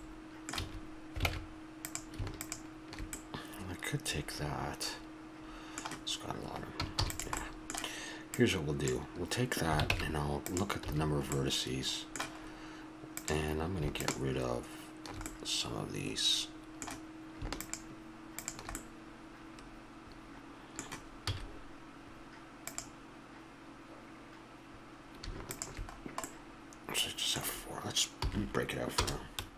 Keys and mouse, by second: 0.5 a, 1.3 ctrl+Tab, 3.1 middle click, 7.0 shift+d, 7.4-10.3 drag, 9.9 ctrl+Tab, 10.8 a, 13.1-15.4 drag, 15.4 middle click, 16.1-18.9 drag, 18.9-21.3 middle drag, 21.3 x, 25.5-27.2 drag, 27.2-28.2 middle drag, 28.2 p.